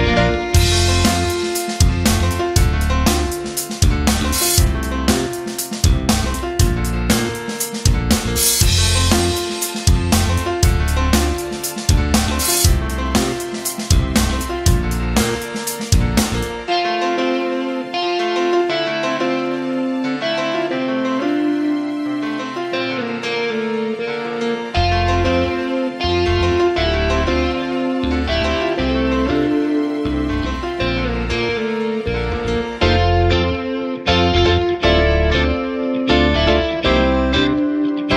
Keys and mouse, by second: 1.9 right click, 2.2 b, 3.2 e, 4.6 alt+z, 5.2 Tab, 6.3-8.1 drag, 8.2 Tab, 9.2 ctrl+r, 13.7 ctrl+r, 14.9 middle click, 15.7 shift+middle click, 16.4 ctrl+r, 17.5 middle click, 18.3 KP_1, 19.5 KP_3, 19.9 Tab, 20.4-20.7 shift+middle drag, 20.8 w, 26.5 shift+middle drag, 27.1 shift+middle drag, 27.6 Tab, 28.2 right click, 28.6 alt+z, 29.1 right click, 29.3 c, 30.1 g, 34.5 right click, 34.7 g, 36.2 right click, 36.3 g, 37.9 right click.